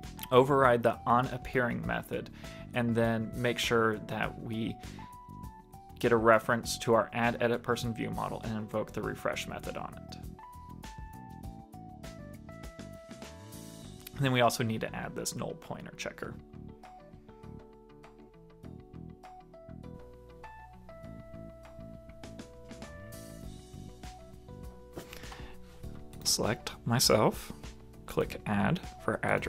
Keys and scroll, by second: 3.5 super+Tab, 3.6 super+Right, 19.0 super+s.